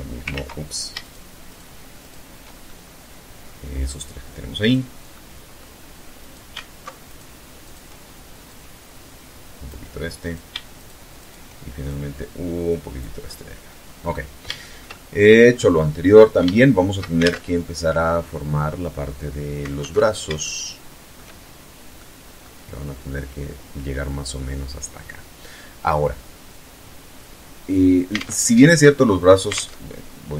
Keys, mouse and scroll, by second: 0.1 shift+right click, 0.6 shift+right click, 1.1 shift+right click, 1.8-2.8 shift+middle drag, 3.0 click, 4.3-4.8 middle drag, 5.3 right click, 6.2 alt+shift+right click, 6.7 alt+shift+right click, 7.6-9.0 drag, 9.3 right click, 9.9 shift+right click, 10.3 shift+right click, 11.0-12.3 shift+drag, 12.4 scroll down 2, 12.8-13.3 middle drag, 13.3 scroll down 2, 13.7-14.5 shift+middle drag, 14.6-15.1 shift+scroll up 3, 15.3 scroll down 2, 15.6-16.3 shift+middle drag, 16.3 alt+shift+Tab, 18.9 alt+Tab, 19.5 shift+click, 20.6 shift+scroll down 1, 21.1 click, 25.9-26.2 scroll up 1, 26.6 scroll down 1, 27.2 alt+Tab, 28.7 alt+Tab.